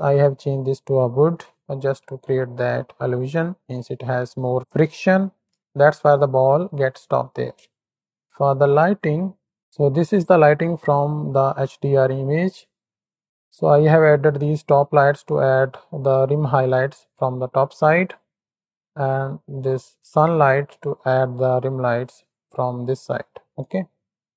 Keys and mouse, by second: 9.6 z, 11.6-13.2 middle drag, 19.9 click, 20.8-21.4 shift+middle drag, 23.7-24.3 shift+middle drag.